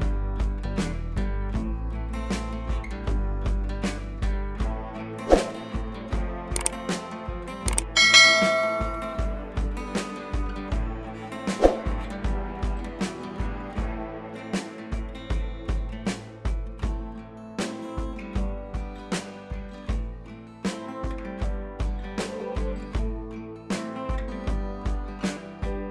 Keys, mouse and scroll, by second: 1.5 click, 4.0 click, 8.8 right click, 9.9-14.5 drag, 19.9 click, 25.7 ctrl+z.